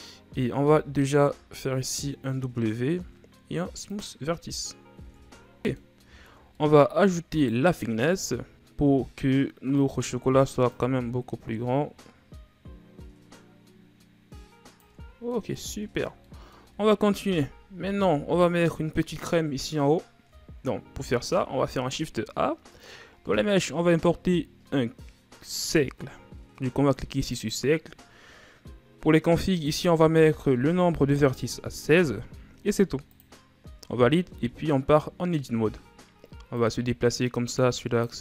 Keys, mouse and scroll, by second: 0.6 w, 5.0 Tab, 5.6 middle click, 6.2-6.5 shift+scroll down 4, 6.5 middle click, 6.9-7.3 scroll up 2, 7.3 right click, 7.8-9.7 middle drag, 9.7-13.6 drag, 15.0 scroll up 1, 15.1 scroll down 2, 15.3-15.8 middle drag, 15.8-16.2 scroll down 2, 16.2-17.3 middle drag, 17.3 KP_1, 17.9 a, 21.0 shift+a, 29.6-32.6 drag, 34.8 Tab, 36.6-38.2 drag.